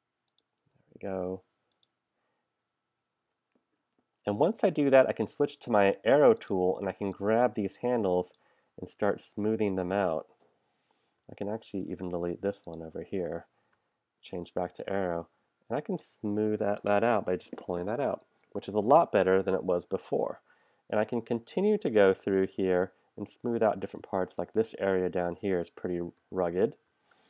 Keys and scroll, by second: 5.1 a, 11.3 p, 13.8 a, 18.9 super+-, 26.2 super+=.